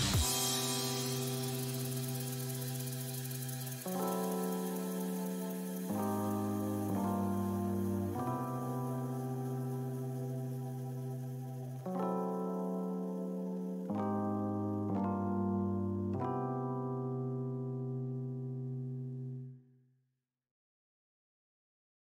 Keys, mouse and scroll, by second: 0.3-2.5 middle drag, 2.5 f, 3.2-4.8 drag, 4.8 middle click, 5.2-6.9 drag, 6.9 middle click, 7.3-10.3 drag, 12.8-14.3 middle drag, 14.3-15.7 drag, 15.7 middle click, 16.1-19.1 drag, 19.6 middle click, 20.1 click, 20.5-22.2 middle drag.